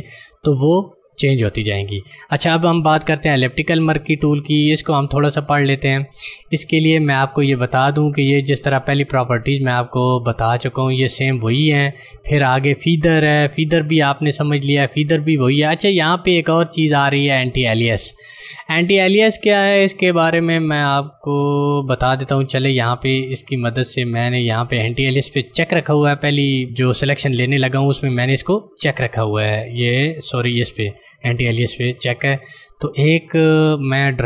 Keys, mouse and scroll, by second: 3.4 click, 22.9 click, 26.6 click, 29.7 click.